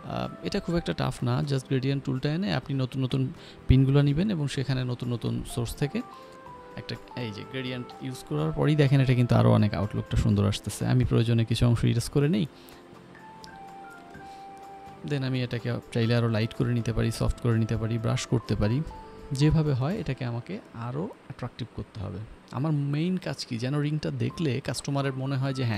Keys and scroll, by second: 4.8 g, 8.3 e, 12.2 ctrl+z, 20.3 ctrl+alt+z.